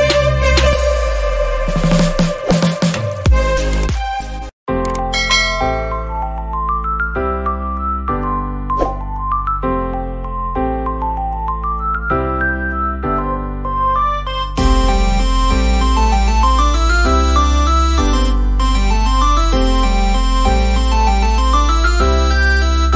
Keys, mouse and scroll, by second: 0.9 click, 11.4 space, 11.5 click, 11.7 space, 12.6 click, 12.7-15.3 typing, 13.2 click, 13.9 click, 14.7 click, 15.0 click, 15.5 click, 16.4 space, 16.5-22.9 drag.